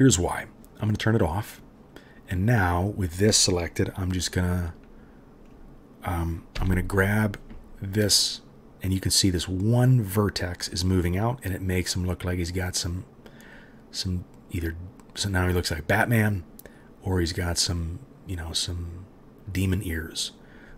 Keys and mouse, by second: 1.5 middle click, 1.6-5.4 right drag, 5.4-6.5 middle drag, 6.5-20.7 right drag, 6.5 g.